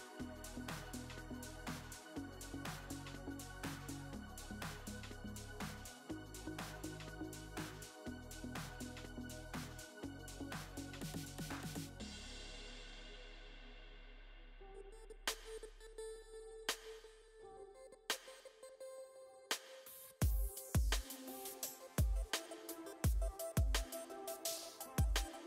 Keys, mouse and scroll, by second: 0.5-5.3 drag, 2.7 f, 4.8 f, 5.2-6.9 middle drag, 6.5 KP_1, 6.8 KP_3, 7.5 KP_1, 7.8-9.6 middle drag, 9.4 click, 10.7 e, 11.5 g, 14.8-16.1 middle drag, 15.3 click, 16.1 e, 16.7 g, 18.1 KP_1, 19.3 click, 20.8 middle click, 21.5-23.6 drag, 23.3 s, 24.7 middle click.